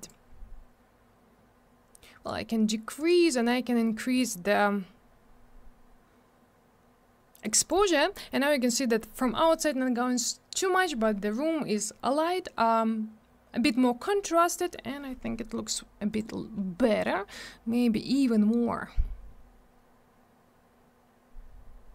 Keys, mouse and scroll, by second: 0.1 click, 3.0 click, 3.1 click, 4.2 click, 16.1 click, 16.2 click, 17.0 click.